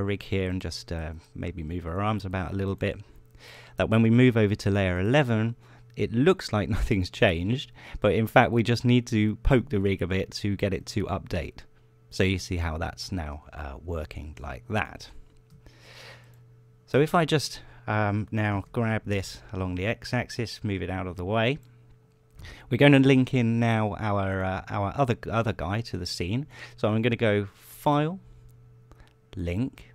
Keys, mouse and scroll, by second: 0.8 r, 2.2-3.5 right drag, 2.6 r, 3.7 click, 11.9 right click, 15.5 a, 19.4 g, 22.4 click, 24.4 click, 25.0 click, 26.0 click, 26.6 scroll down 1, 28.4 click, 29.8 click.